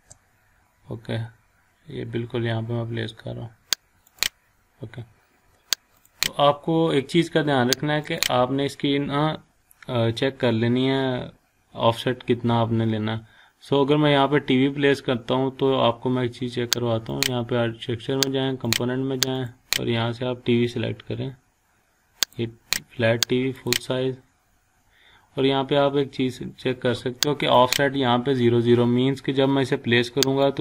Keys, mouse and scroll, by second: 0.4-1.6 scroll up 1, 4.0 click, 6.6 scroll up 1, 8.0 click, 9.9 scroll down 1, 10.7 scroll up 1, 11.9-12.7 scroll down 1, 12.7-13.7 scroll up 1, 13.7-14.7 scroll up 1, 17.2 click, 20.8-21.3 scroll down 1, 21.3-22.2 scroll up 1, 22.2 click, 25.1 scroll down 1, 26.1-27.4 scroll up 1, 27.4 click, 30.4 click.